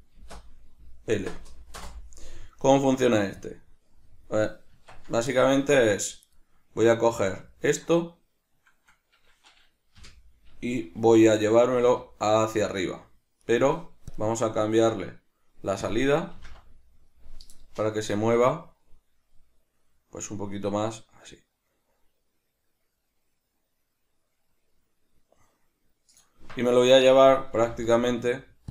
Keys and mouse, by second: 4.7 Tab, 5.3 middle click, 6.3 right click, 6.9 right click, 7.5 middle click, 13.5 right click.